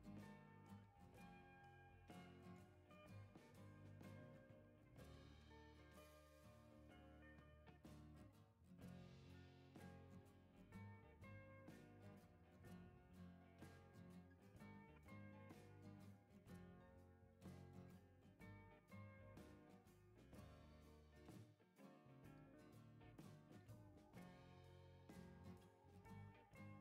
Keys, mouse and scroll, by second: 0.6 right click, 0.6 click, 1.9-2.3 scroll down 3, 2.4 click, 2.8 right click, 3.9-4.4 scroll up 4, 5.4 click, 6.6 ctrl+click, 9.2 click, 11.4 5, 12.7 click, 13.9-14.3 scroll down 4, 14.5 right click, 15.4-16.4 scroll up 8, 16.9 click, 17.2-17.6 scroll down 4, 17.7 click, 18.4 right click, 18.9 right click, 19.5-20.0 scroll up 4, 20.4 ctrl+scroll up 2, 20.9 ctrl+click, 23.6 click, 26.2 1, 26.6 0.